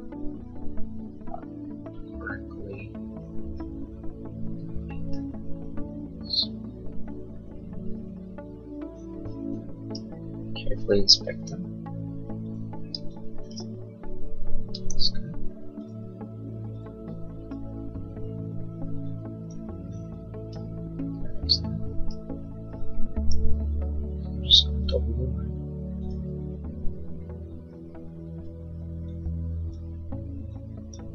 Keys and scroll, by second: 12.8 e, 17.2 e, 23.4 l.